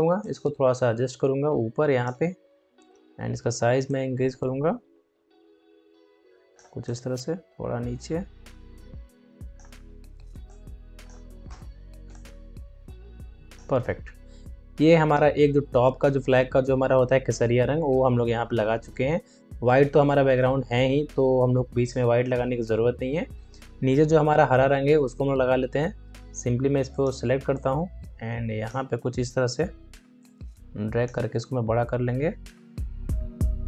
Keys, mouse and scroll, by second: 2.5 ctrl+t, 3.8-11.4 drag, 11.4 Return, 12.0-29.0 drag, 29.0 ctrl+t, 30.1-33.6 drag.